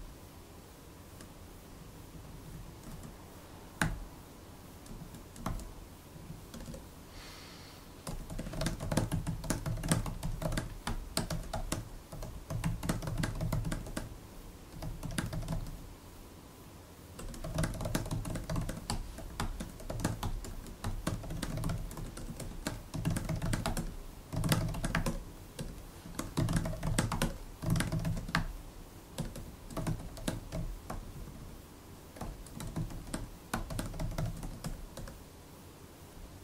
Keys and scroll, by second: 1.7 super+Left, 2.0 super+Left, 2.4 super+Left, 2.8 shift+Right, 3.7 -, 4.8 shift+Left, 5.3 shift+=, 6.0 Down, 6.1 Down, 6.4 Return, 6.5 Return, 7.7-16.0 typing, 17.0-34.8 typing, 32.1 super+BackSpace.